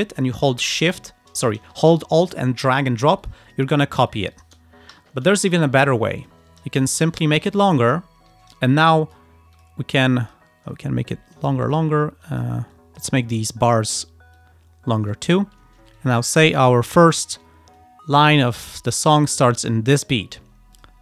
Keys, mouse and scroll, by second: 2.3 alt+click, 3.3 alt+click, 4.2 alt+click, 5.0 Delete, 5.6 click, 5.9 ctrl+scroll down 2, 7.8-8.1 ctrl+scroll up 2, 8.9 click, 9.7 click, 10.0 click, 11.1 ctrl+scroll up 2, 11.7 ctrl+click, 12.3 click, 12.8 click, 13.3-13.8 ctrl+scroll down 4, 13.9 ctrl+click, 14.4 ctrl+click, 15.3-15.7 ctrl+scroll up 2, 16.1 ctrl+click, 16.8-17.2 ctrl+scroll up 2, 17.8 click, 18.8-19.2 ctrl+scroll up 2, 19.9-20.4 ctrl+scroll down 4, 20.8 ctrl+click.